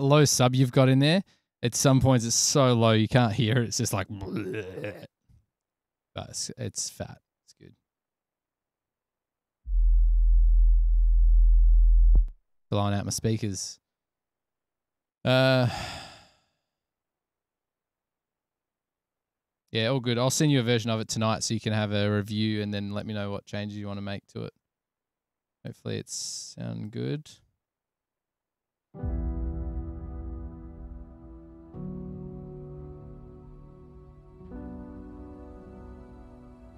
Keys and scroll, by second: 20.0 Return, 20.1 Return, 20.9 super+[, 21.0 super+[, 21.8 super+[, 24.2 s, 24.9 s, 27.4 super+s.